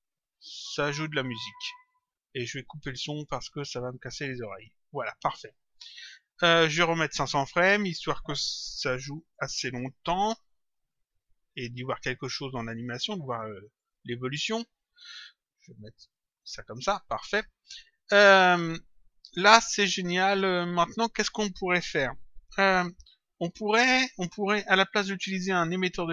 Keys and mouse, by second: 1.8 click, 3.2 click, 4.4 click, 7.0 click, 9.6 Return, 10.6 click, 12.0 click, 13.7 click, 15.0 click, 17.6 click, 20.6 click.